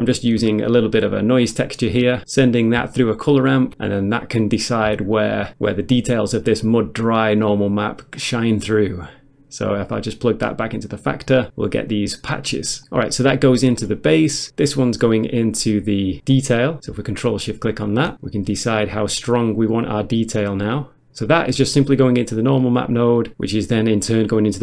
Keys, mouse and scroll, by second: 0.8 ctrl+shift+click, 1.0 ctrl+shift+click, 1.1 ctrl+shift+double click, 1.4 ctrl+shift+click, 2.9 ctrl+shift+click, 5.1 ctrl+shift+click, 8.2 click, 10.5 click, 13.8 click, 14.1 middle click, 14.5 middle click, 15.6 click, 17.2 ctrl+shift+click, 18.3 click, 21.1 scroll down 1, 21.2 middle click, 21.4 middle click, 22.0 click, 22.1 middle click, 22.3 middle click, 22.8 click, 23.0-23.3 scroll down 1, 23.3 middle click, 24.2 click.